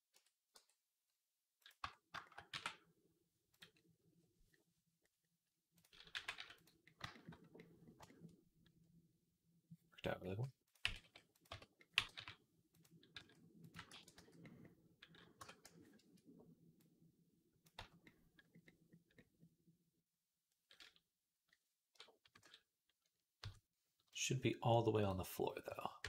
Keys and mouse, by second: 0.0 Tab, 0.4 g, 1.6 Tab, 2.1-3.5 middle drag, 2.3 e, 3.5-6.8 drag, 5.9 g, 6.8-10.5 shift+middle drag, 10.5 click, 10.6 g, 11.3 Tab, 11.8 g, 13.0 s, 13.8 ctrl+a, 14.3-16.6 middle drag, 15.2 Tab, 15.8 a, 16.6-26.0 drag, 17.6 Tab, 22.1 KP_1, 23.2 KP_3.